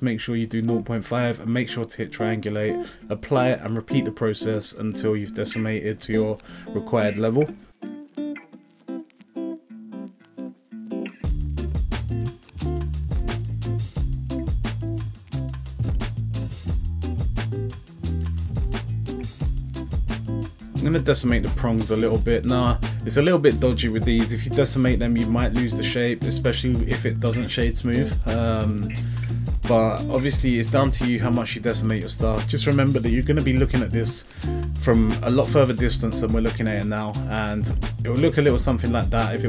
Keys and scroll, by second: 5.8 0, 6.1 ., 6.3 5, 6.8 Return, 14.6 a, 22.3 0, 22.5 ., 22.7 5, 23.3 Return, 28.1 a, 39.0 z.